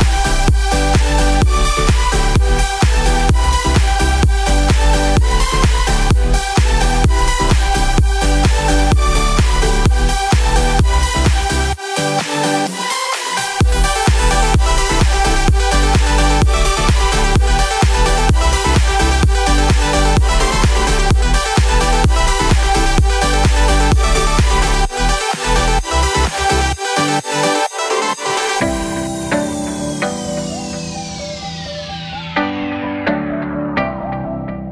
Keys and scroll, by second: 9.3 ctrl+z, 14.3 ctrl+z, 15.3 ctrl+z.